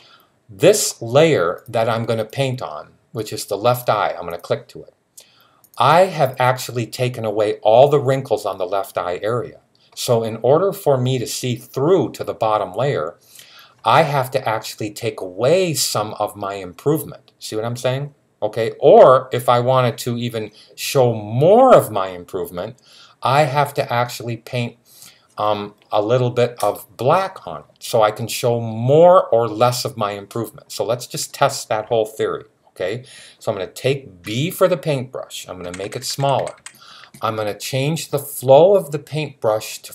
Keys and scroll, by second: 34.1 typing, 35.4-36.4 typing.